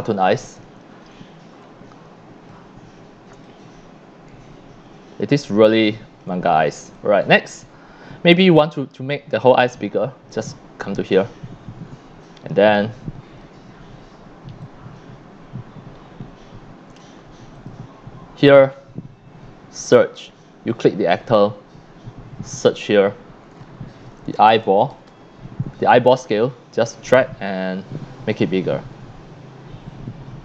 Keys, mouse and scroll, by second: 2.7 scroll up 1, 3.3 c, 3.4-5.2 drag, 5.5-6.2 drag, 6.4 scroll down 2, 6.9 click, 6.9 x, 7.3 c, 7.8 scroll up 1, 8.5-9.0 drag, 10.3 click, 12.2-13.4 drag, 14.6-17.0 drag, 17.6 click, 20.0 click, 20.7 click, 22.7 click, 24.2-25.4 typing, 27.8-30.4 drag.